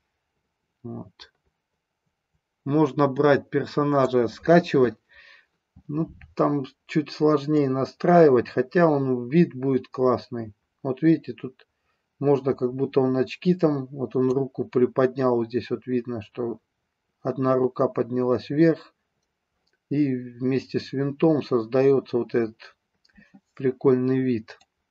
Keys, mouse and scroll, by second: 7.4-14.3 drag, 24.6-24.9 drag.